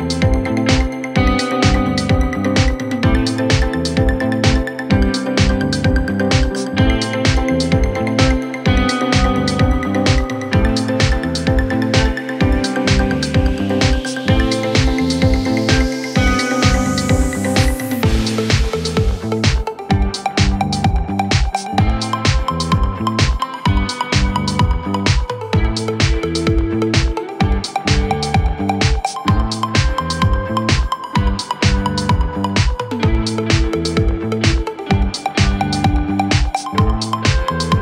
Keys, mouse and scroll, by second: 0.2 Delete, 0.4 Delete, 1.9 Delete, 3.0 Delete, 3.2-3.7 scroll down 2, 3.3 middle click, 3.7 middle click, 3.9 middle click, 4.2-4.6 scroll up 10, 4.9 double click, 5.6 typing, 7.0 typing, 8.3-9.2 typing, 10.4 middle click, 10.5 space, 11.7-13.5 typing, 12.7 middle click, 15.4 scroll down 1, 16.6-17.1 typing, 16.8-17.1 scroll up 4, 18.0-18.4 scroll down 6, 18.6 scroll up 5, 18.9-19.4 typing, 20.6-22.4 typing, 22.3 scroll up 1, 22.7-23.2 scroll down 1, 23.6 middle click, 24.9 m, 26.4 middle click, 26.8 scroll down 2, 26.9 middle click, 27.2 scroll up 4, 27.3 space, 27.6 double click, 27.7 double click, 28.0 scroll down 1, 29.2 double click, 29.4 middle click, 30.1 Delete, 30.5 Delete, 31.8 Delete, 32.3 scroll down 1, 32.4 middle click, 32.7 scroll up 4, 34.1 scroll up 11, 36.3-36.8 scroll down 17, 36.8 scroll up 1.